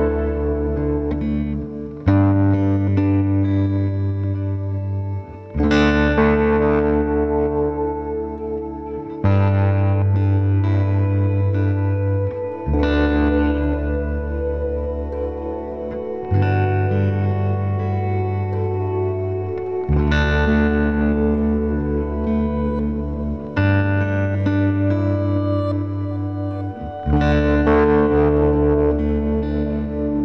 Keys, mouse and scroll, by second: 0.2-0.5 scroll up 1, 0.7 g, 3.9-5.2 scroll down 1, 5.2 scroll up 2, 5.8 click, 6.6 g, 9.6-10.2 scroll down 1, 10.2 Tab, 10.4-11.2 scroll down 1, 11.4 click, 11.8 drag, 12.6 Tab, 14.8 Tab, 16.7-18.3 drag, 18.3-18.8 scroll down 1, 18.8 a, 19.7-20.5 scroll up 1, 20.5 shift+d, 22.2 r, 24.1 r, 25.3 g, 25.8 scroll up 1, 26.0 g, 27.3-30.2 typing, 27.7 scroll down 1, 27.9 shift+middle click.